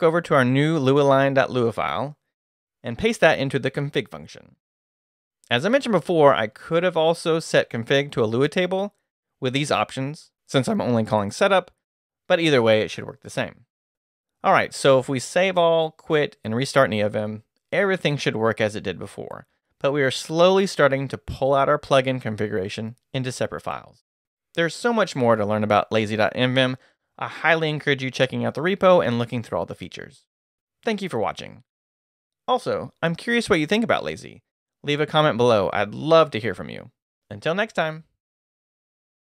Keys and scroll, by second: 0.8 Down, 1.6 Return, 2.8 k, 3.0 shift+p, 4.5-5.7 typing, 7.2 Escape, 7.5-8.3 typing, 9.7 Return, 11.6 Escape, 11.8 Return, 13.0 Escape, 13.6 shift+Escape, 13.7-16.8 typing, 15.7 Return, 23.9 2, 27.5 Escape, 28.1 shift+Escape, 28.3 shift+;, 28.9 shift+q, 29.0 Return.